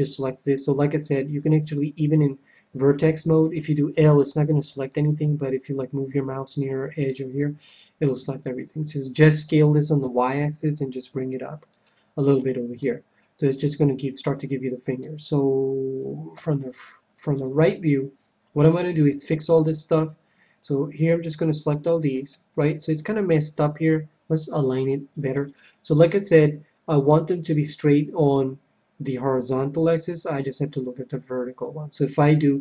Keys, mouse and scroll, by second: 3.7-7.0 typing, 9.4 s, 11.8-13.7 drag, 12.3 a, 12.7-14.4 middle drag, 16.3 KP_3, 17.3 KP_1, 18.9 c, 22.1-23.9 right drag, 22.5-24.2 middle drag, 24.9 KP_1.